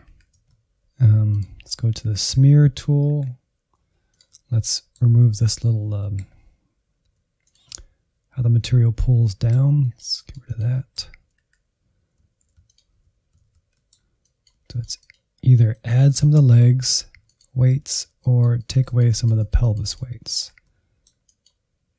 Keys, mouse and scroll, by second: 0.0 Insert, 1.2 click, 2.0 Insert, 3.1 Insert, 3.8 f, 4.2-6.3 middle drag, 6.3-7.1 scroll up 1, 7.1 f, 7.7-9.8 middle drag, 9.8 click, 10.7 middle click, 11.3 Insert, 12.3 alt+z, 13.0 ctrl+click, 13.3 alt+z, 13.7 middle click, 14.2-20.3 drag, 20.3 Insert, 20.6 middle click, 21.2 click, 21.9 Insert.